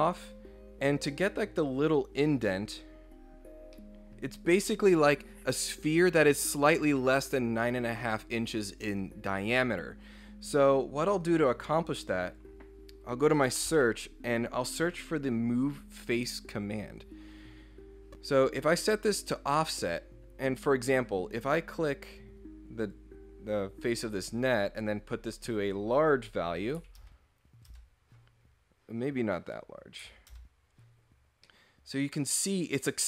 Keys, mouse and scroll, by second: 0.1 click, 0.5 scroll down 4, 2.7-3.2 scroll up 4, 3.4 scroll down 2, 3.7 middle click, 11.2 click, 12.2 click, 13.2-14.2 typing, 17.3 click, 19.8 click, 22.8 click, 24.1 scroll down 2, 24.9 click, 25.6 click, 27.7 Return, 28.5 scroll up 2, 29.4 click, 30.3 Return, 31.2 scroll down 1, 31.4-32.8 middle drag.